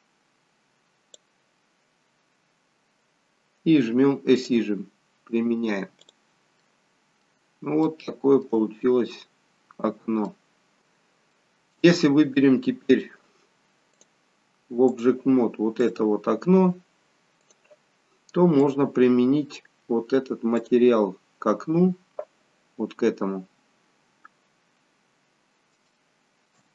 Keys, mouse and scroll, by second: 4.5 click, 5.3-6.0 scroll down 2, 6.0 scroll down 3, 6.1 click, 6.6 middle click, 7.9 shift+middle click, 9.2 middle click, 11.4 middle click, 14.1 click, 15.9 click, 19.9 click, 24.6-25.1 scroll up 4, 25.1-26.0 scroll down 1, 26.0 shift+middle click, 26.0 scroll down 3.